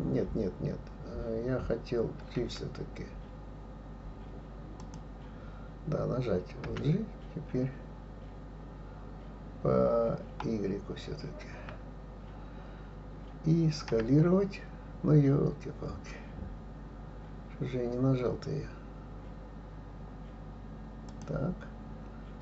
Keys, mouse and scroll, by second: 6.6 g.